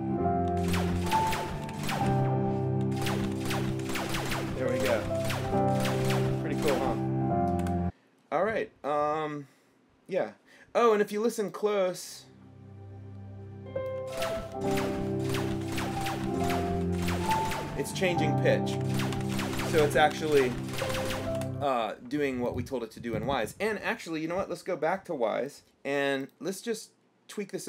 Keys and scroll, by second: 0.7-6.6 typing, 7.8 Escape, 14.2-17.5 typing.